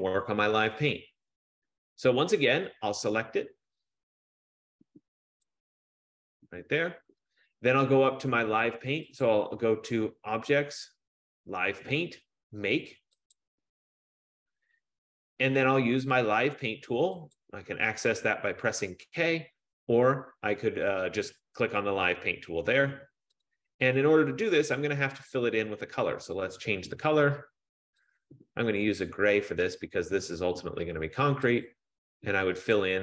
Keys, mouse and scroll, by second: 5.5 click, 9.5 click, 13.6 click, 17.5 click, 23.5 click, 26.2 click, 26.4 click, 30.7 click, 31.8 click, 32.9 click.